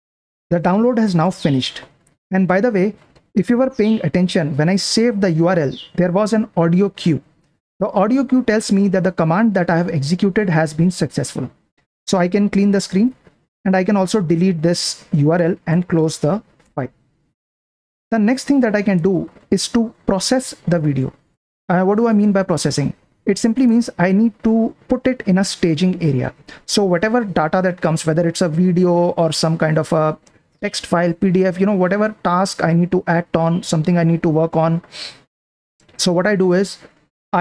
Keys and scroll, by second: 0.0 super+Print, 13.1 ctrl+l, 14.0 super+l, 15.0-16.7 typing, 19.3 super+4, 19.4 typing, 20.8-21.8 typing, 23.3 Return, 23.4-24.2 typing, 33.8 Down, 34.6 Up.